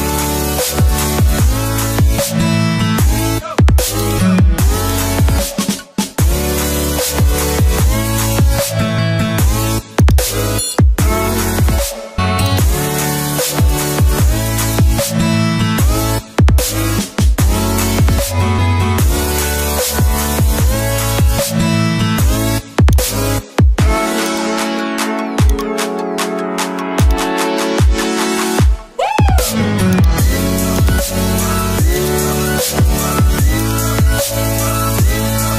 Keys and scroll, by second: 2.6 ctrl+t, 6.6 Return, 11.1 alt+i, 17.1 ctrl+o, 20.4 ctrl+i.